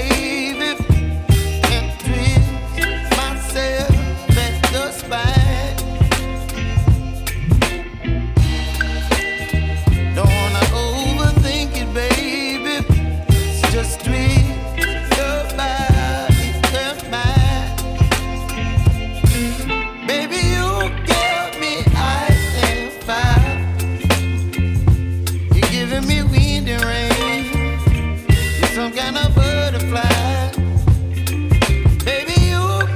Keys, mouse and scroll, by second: 2.5 click, 5.1 click, 11.8-31.3 drag.